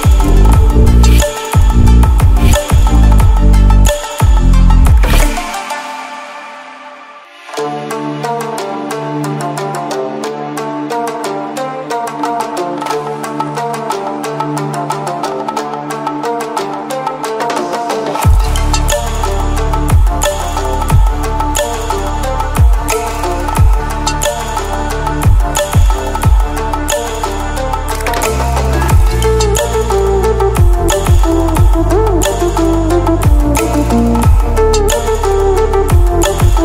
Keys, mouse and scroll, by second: 1.3 ctrl+w, 2.6 ctrl+w, 4.0-6.9 drag.